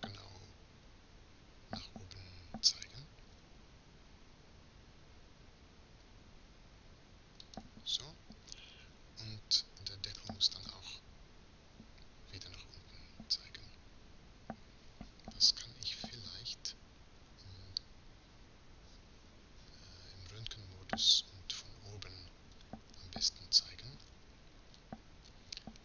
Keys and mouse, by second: 3.4 r, 10.9-11.9 right drag, 11.9-16.4 middle drag, 16.4 z, 19.8-22.6 middle drag, 22.6 KP_7.